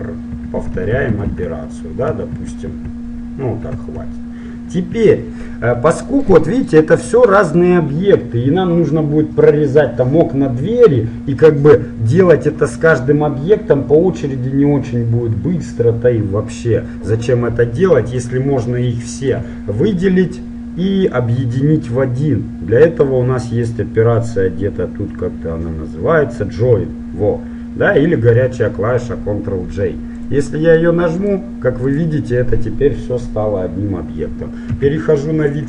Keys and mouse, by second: 0.4-2.7 typing, 6.3-9.5 right drag, 6.3 shift+r, 18.3-20.1 drag, 23.2-25.1 drag, 30.2-32.3 drag, 31.3-33.9 right drag, 34.7 KP_7, 35.5-35.6 middle drag.